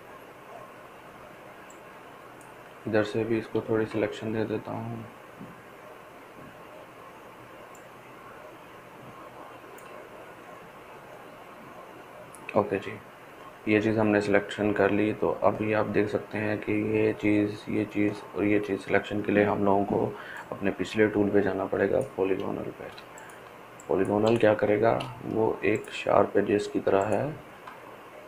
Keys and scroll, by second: 23.7-25.0 ctrl+space.